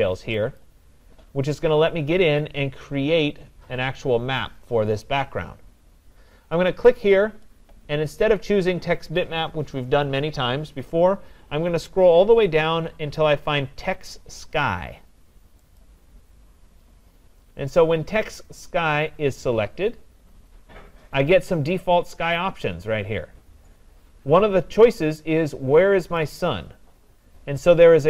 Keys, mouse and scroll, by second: 0.6 click, 6.9 click, 13.2 click, 15.8 click, 26.2-28.0 drag.